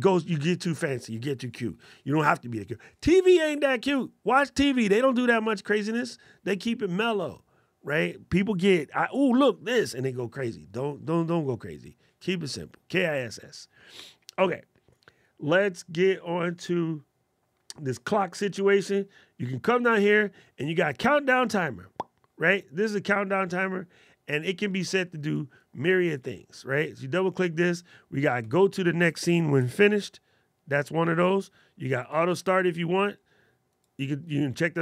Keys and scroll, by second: 29.5 alt+super+8.